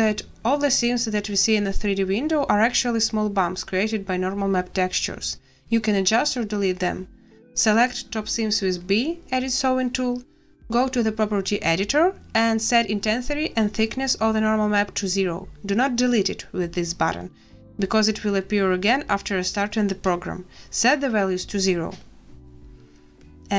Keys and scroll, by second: 7.4 b, 13.5 0, 13.8 Return, 15.2 0, 15.5 Return, 20.7 a.